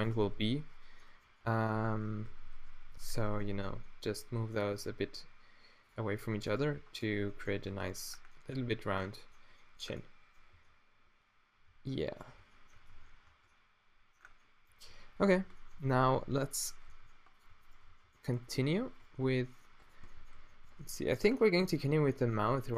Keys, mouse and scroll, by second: 0.3 click, 1.9 Tab, 2.1 a, 2.3 a, 2.9 ctrl+n, 4.7 middle click, 4.9 g, 6.6 g, 7.7 Tab, 10.5 a, 13.0 Tab, 13.3 Tab, 15.9 Tab, 17.0 g, 18.0 g, 19.2 g, 20.4 a, 20.7 Tab, 22.0 Tab.